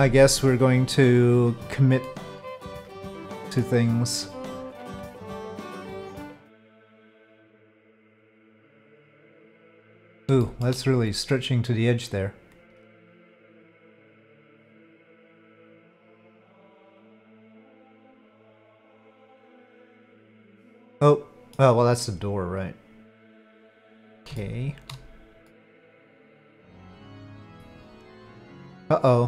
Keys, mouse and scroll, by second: 1.3 middle click, 2.0 middle click, 3.4 middle click, 4.5 click, 5.1-6.2 drag, 6.2 middle click, 8.7 click, 9.6-10.1 middle drag, 10.4 shift+middle drag, 14.8-15.8 middle drag, 18.8 click, 19.3-21.5 middle drag, 22.7-23.9 drag, 24.3 shift+drag, 24.5-24.9 shift+middle drag, 25.4-26.9 middle drag.